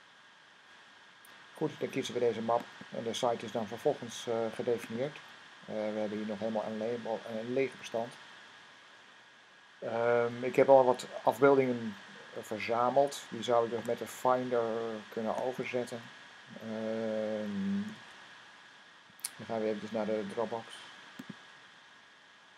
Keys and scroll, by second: 13.5 Tab, 17.7 n.